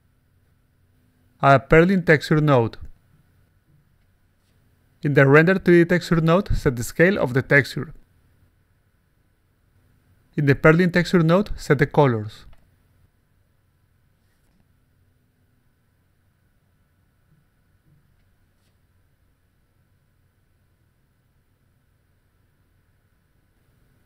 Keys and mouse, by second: 0.0-1.2 typing, 1.5 click, 2.1 click, 3.3 click, 4.5 click, 5.9 click, 6.5-9.5 typing, 10.6 click, 10.9 a, 11.7 click, 12.4 click, 13.6 click, 13.9 8, 15.1-16.9 typing, 18.1 click, 18.9 click, 19.6 8, 20.7-23.5 typing.